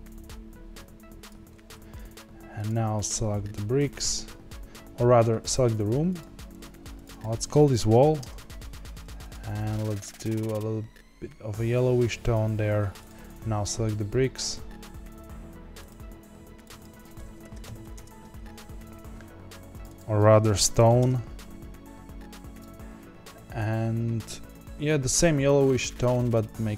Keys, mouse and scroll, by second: 2.6 click, 5.4 click, 6.6 click, 6.9 click, 7.1-8.1 drag, 10.1 click, 13.0 click, 16.0 click, 16.5 click, 16.7-19.8 drag, 19.8-23.0 drag.